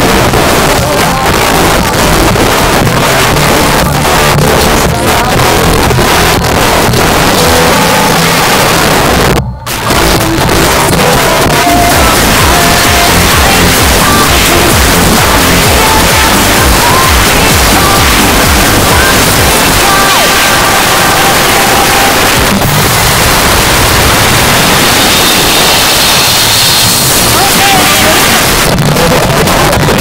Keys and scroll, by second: 28.4 Page_Down.